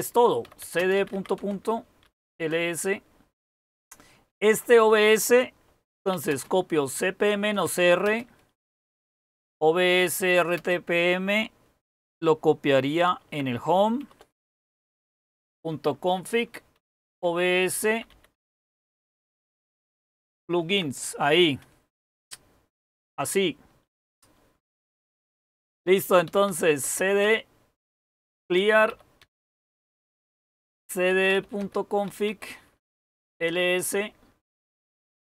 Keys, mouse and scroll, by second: 0.2-2.4 typing, 5.8-11.1 typing, 12.7-20.4 typing, 22.1 typing, 26.1-29.1 typing, 30.3-33.5 typing.